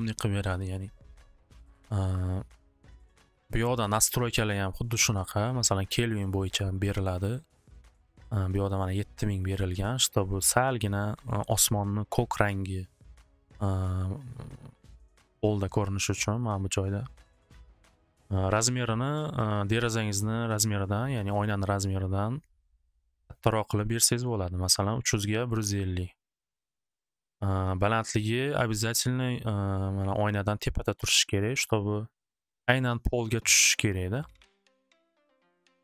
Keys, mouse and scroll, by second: 5.2 click, 6.1 click, 6.6 click, 7.2 click, 7.8 click, 8.6 click, 9.4 click, 10.5 click, 16.3 click, 18.3 click, 19.4 click, 23.0 click, 24.0 click, 24.8 click, 25.6 click, 27.7 click, 28.8 middle click, 31.4 click, 35.3-35.8 middle drag.